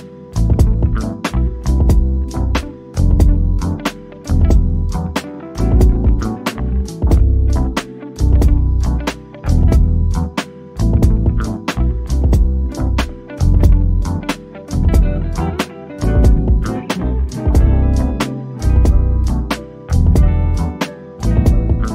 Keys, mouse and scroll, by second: 0.1 middle click, 0.9 click, 1.4 scroll down 1, 2.0 click, 2.4 scroll down 1, 2.9 click, 4.0 Escape, 5.2 click, 7.1-7.9 scroll down 1, 9.4 click, 11.2 click, 12.3 0, 15.0-16.7 drag, 16.7 2, 19.2-19.9 typing.